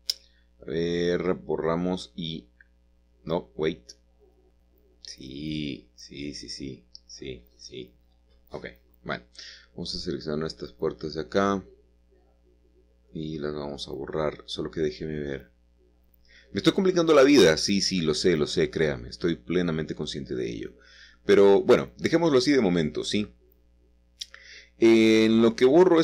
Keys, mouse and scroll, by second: 2.0 middle click, 2.1-2.9 scroll up 1, 3.5 click, 4.4-5.5 scroll down 1, 4.9-9.5 middle drag, 9.2-9.5 scroll up 1, 10.0 click, 10.4 Tab, 10.7 click, 12.1 click, 12.9 shift+click, 14.3 shift+click, 16.1 scroll up 1, 17.4 shift+click, 18.6-19.6 scroll down 1, 21.7 ctrl+z, 22.2-23.3 ctrl+scroll up 1, 23.8-25.5 middle drag.